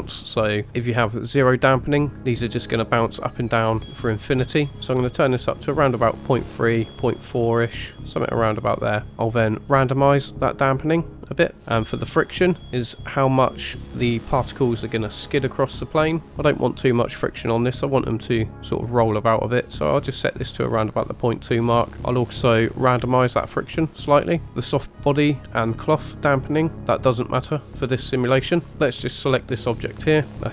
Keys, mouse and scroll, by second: 5.1-8.7 drag, 9.6-11.6 drag, 17.4-21.9 drag, 23.0-24.4 drag, 28.7 middle click, 28.7 click, 28.7-29.3 scroll up 2, 28.7 KP_1, 29.3 click.